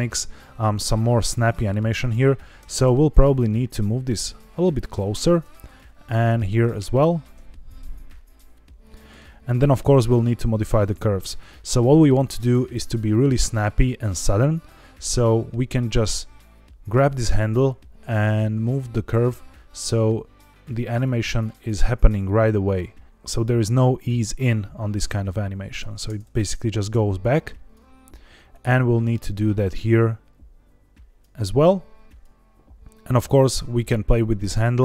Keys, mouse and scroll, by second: 1.1 click, 1.9 shift+click, 2.5 g, 2.8 x, 4.9 click, 5.6 click, 6.0 click, 6.3 g, 6.5 y, 7.3 x, 8.8 click, 10.0 click, 11.3 click, 21.0-25.7 drag, 25.9 space, 26.7 space, 27.1-27.7 drag, 28.4 click, 29.1 click, 32.0 click, 33.2 click.